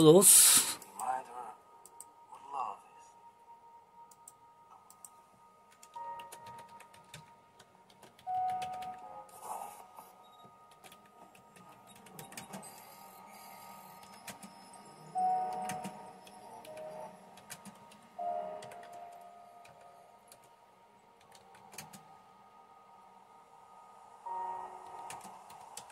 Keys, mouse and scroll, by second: 0.9 click, 2.0 click, 4.6 click, 5.1 click, 5.5 click, 6.3-9.6 typing, 10.7-12.7 typing, 14.0 typing, 15.4-18.7 typing, 19.8-22.2 typing, 24.8-25.9 typing.